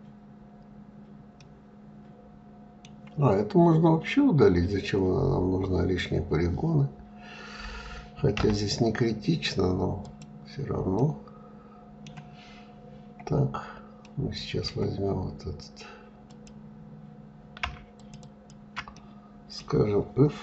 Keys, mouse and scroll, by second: 1.0-4.1 middle drag, 10.5-12.3 middle drag, 12.3-12.6 scroll up 2, 13.6-15.9 middle drag, 15.9 click, 17.6 shift+click, 17.8 shift+click, 18.5-20.4 middle drag.